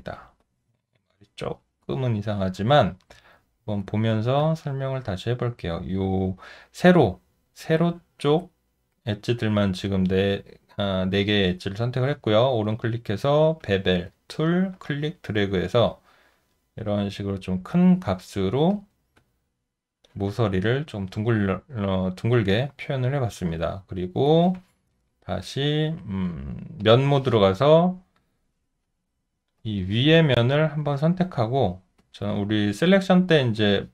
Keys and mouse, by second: 0.2 shift+click, 1.2 shift+click, 1.8 alt+click, 3.8 shift+click, 4.4 alt+click, 19.2 alt+click, 23.9 alt+right click, 32.0 alt+click.